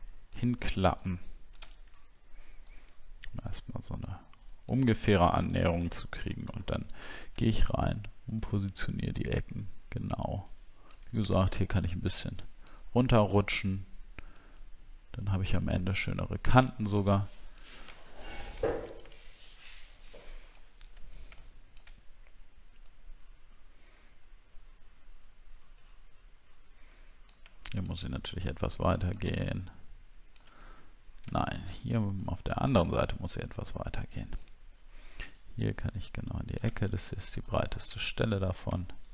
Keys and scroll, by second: 6.0 alt+scroll up 1, 6.5 alt+scroll up 1, 7.4-8.4 alt+scroll up 1, 38.1 alt+scroll down 1.